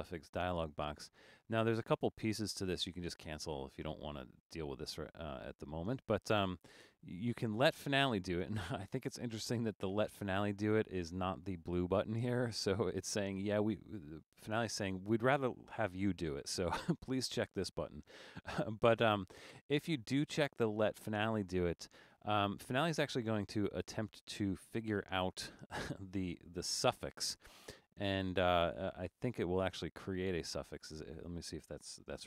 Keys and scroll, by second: 32.1 Return.